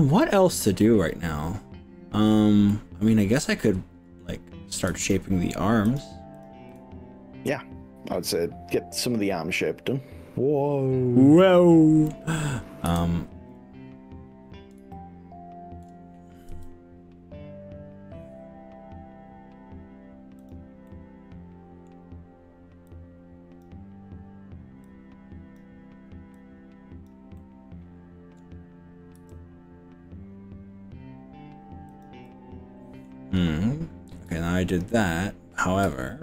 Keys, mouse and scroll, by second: 0.8-2.3 middle drag, 2.7-4.2 middle drag, 5.0 ctrl+click, 5.8 ctrl+click, 6.4 ctrl+click, 6.7-12.0 ctrl+middle drag, 12.9 KP_1, 13.0 KP_3, 14.0-14.6 scroll up 5, 15.0 shift+middle click, 16.6 g, 20.4 click, 20.9 middle click, 21.6 click, 22.0-22.6 scroll down 3, 22.9 click, 24.8 click, 26.4 click, 27.4 middle click, 29.2 g, 31.9 click, 32.3 middle click, 34.4 z.